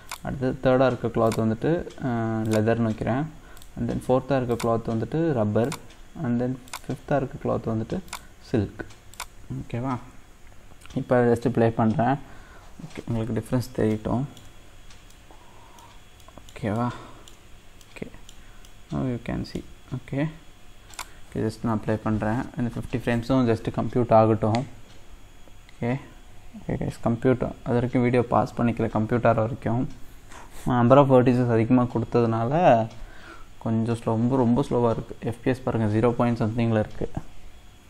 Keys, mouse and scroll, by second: 1.3-3.6 drag, 4.5-6.7 drag, 8.1-11.3 drag, 13.9 shift+middle click, 14.6 scroll up 2, 15.1-17.5 middle drag, 17.5-17.8 scroll up 1, 17.8-20.9 shift+middle drag, 20.9-28.9 drag.